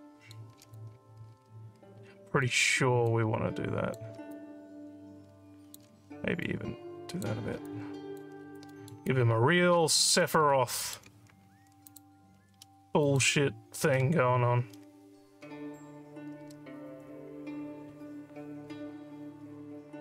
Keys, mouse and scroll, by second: 0.8-2.5 alt+drag, 3.1 click, 4.3-5.7 alt+drag, 6.4 click, 7.7 alt+click, 8.4 alt+scroll down 2, 8.7 alt+middle click, 9.1-10.2 alt+drag, 10.8 alt+middle click, 11.9 click, 13.1 click.